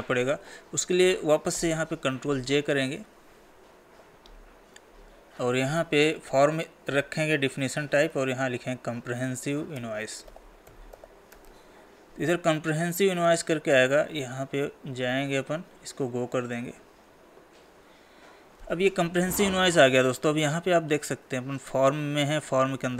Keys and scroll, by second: 2.1 ctrl+j, 8.4 Tab.